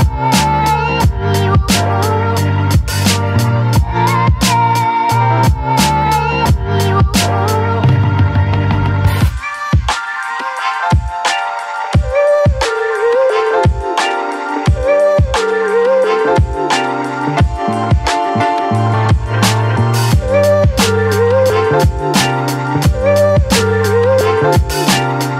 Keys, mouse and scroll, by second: 0.0 right click, 0.1 right click, 0.8 click, 1.1 space, 1.6-5.6 ctrl+drag, 5.6 space, 5.9 click, 7.4-9.1 drag, 9.1 space, 9.4 click, 9.6 space, 11.3-16.6 drag, 16.6 space, 16.8 click, 17.1 space, 17.3 click, 18.7-21.2 drag, 21.2 space, 21.6-23.1 alt+drag, 23.1-25.3 ctrl+drag.